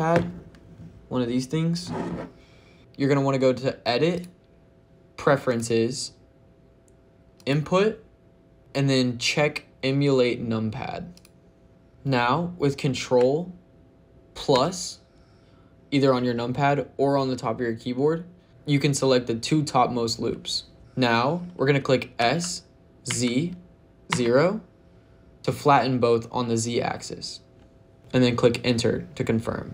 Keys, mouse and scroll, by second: 4.0 click, 22.0 s, 22.9 z, 24.0 KP_0.